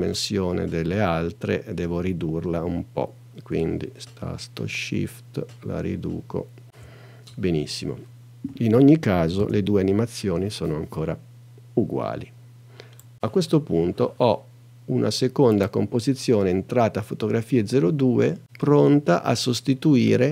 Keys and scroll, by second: 9.4 space.